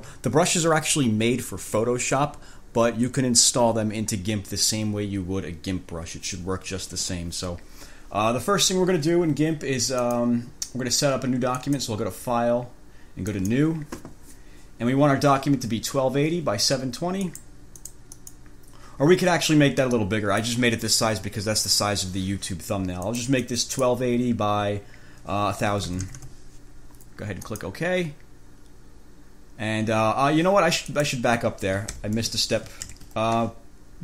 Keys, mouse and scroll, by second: 10.2 click, 11.7 click, 13.5 click, 17.5 click, 18.0 click, 20.1 click, 23.3 click, 25.7-26.6 typing, 27.7 click, 31.1 click, 32.2 ctrl+b, 33.1 ctrl+n.